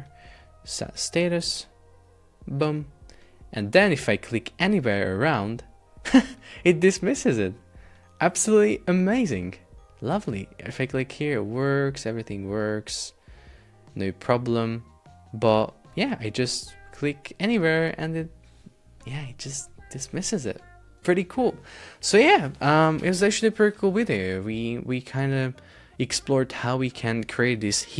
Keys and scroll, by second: 19.6 super+Tab.